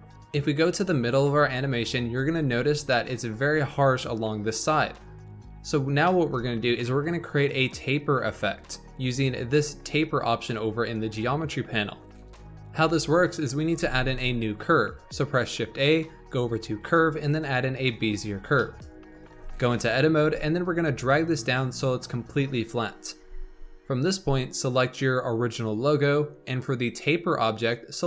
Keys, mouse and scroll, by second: 0.0-0.6 drag, 2.1-2.6 scroll up 2, 2.6-5.7 shift+middle drag, 5.7-6.0 scroll down 2, 6.0-9.0 shift+middle drag, 13.7 shift+a, 18.5-19.3 shift+middle drag, 19.3 Tab, 19.7 click, 20.2 r, 23.1 Tab, 24.5 click, 27.5 click.